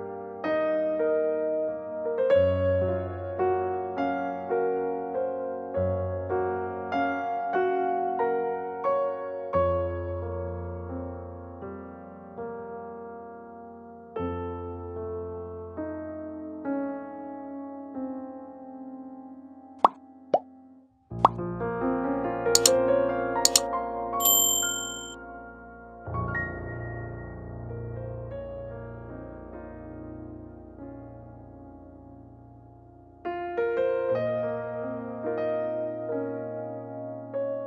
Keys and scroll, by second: 0.0-0.9 typing, 23.2 space, 28.1 ctrl+s.